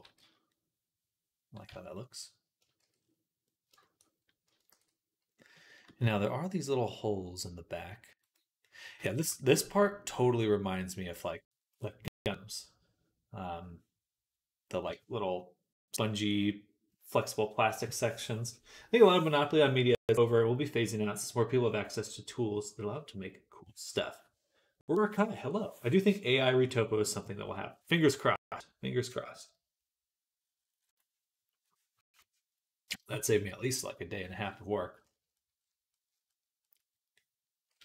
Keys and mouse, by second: 0.0-8.1 middle drag, 0.0 z, 1.5 z, 2.6 shift+c, 4.6 ctrl+s, 8.1 click, 8.2-37.8 middle drag.